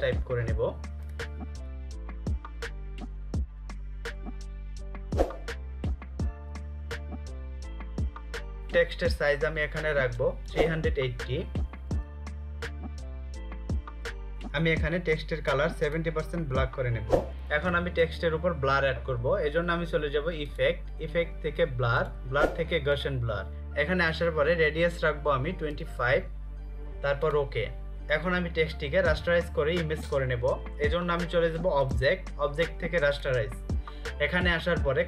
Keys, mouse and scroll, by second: 1.2 click, 3.0-4.9 typing, 7.3 click, 11.4-12.5 typing, 13.8 Return, 15.7 click, 22.4 click, 25.3-26.2 typing, 27.0 click, 31.3 click.